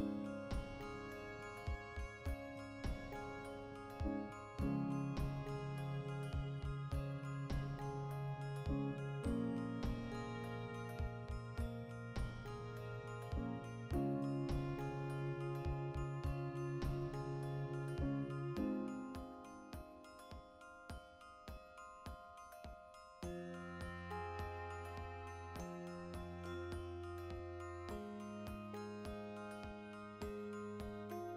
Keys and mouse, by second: 2.2 right click, 2.5-8.8 middle drag, 2.9 Tab, 4.2 ctrl+r, 5.4 click, 5.9 Tab, 8.8 right click, 9.1 KP_Decimal, 9.3-31.0 middle drag, 14.2 \, 15.1 Tab, 22.6 Tab, 24.6 2, 25.6 Tab, 27.2 Tab, 31.0-31.3 alt+right drag.